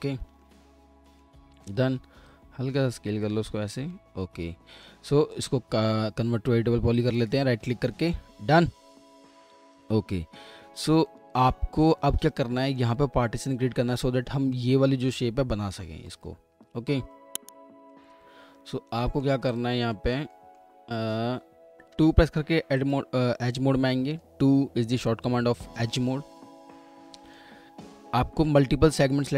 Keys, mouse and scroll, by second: 0.1 w, 0.4 alt+middle click, 1.5 r, 3.9 alt+middle click, 5.0 w, 5.3 right click, 7.9 middle click, 9.0 alt+middle click, 11.7-12.6 scroll up 1, 12.6 middle click, 15.6-16.1 scroll down 1, 16.7 scroll up 1, 17.1 alt+middle click, 18.3-18.9 alt+scroll up 1, 21.2-21.9 scroll up 1, 21.9 2, 23.5-24.3 typing, 23.9 alt+middle click.